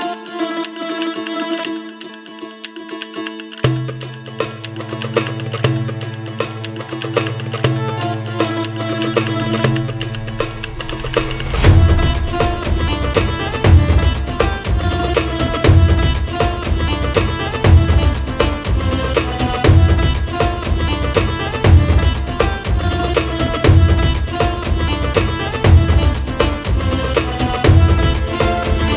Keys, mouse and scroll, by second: 1.2 scroll down 3, 1.3 middle click, 1.5 click, 2.1 drag, 3.0 scroll up 3, 3.3-4.8 shift+drag, 5.8 scroll down 2, 5.9 click, 6.1 x, 6.3 middle click, 7.0 shift+a, 7.9 drag, 8.3-9.1 drag, 9.1-9.5 ctrl+shift+right drag, 9.5-9.9 drag, 10.4 scroll down 7, 10.6 middle click, 10.9-11.4 scroll up 9, 11.4 shift+a, 12.9 middle click, 13.0 scroll down 1, 13.1-13.9 middle drag, 13.9-15.7 drag, 15.7 x, 15.9 shift+click, 17.8-19.6 drag, 20.5 middle click, 21.1-23.7 drag, 25.4 shift+a, 26.2 middle click, 26.4-28.8 drag.